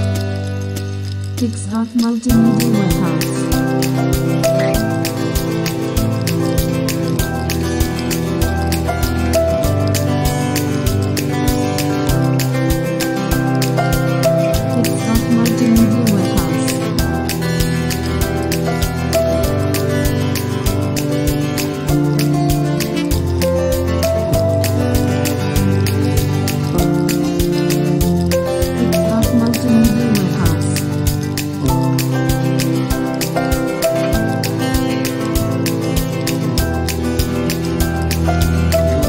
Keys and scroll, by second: 7.2 shift+super+s, 15.3 shift+super+s, 21.2 super+o, 23.3 alt+shift+super+i, 25.9 super+s, 26.5 super+w, 27.0 alt+shift+super+i, 27.9 super+w.